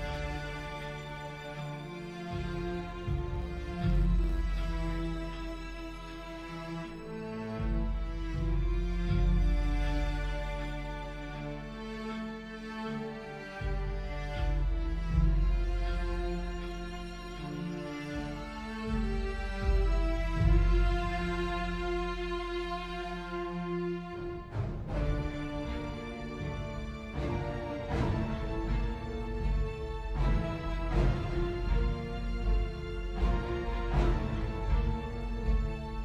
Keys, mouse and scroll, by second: 8.3-9.7 typing.